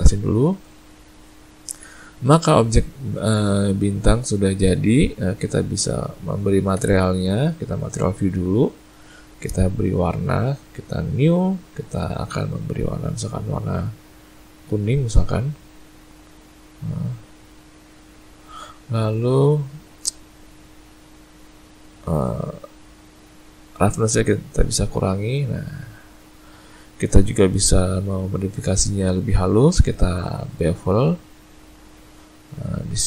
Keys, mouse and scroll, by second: 0.5 middle click, 1.2 ctrl+middle click, 2.0 middle click, 2.5 shift+middle click, 3.0 ctrl+middle click, 3.6 middle click, 4.4 middle click, 6.7 z, 9.9 click, 11.1 click, 19.4 middle click, 24.1 click, 26.6 middle click, 27.9 click, 28.9 click, 31.6 middle click.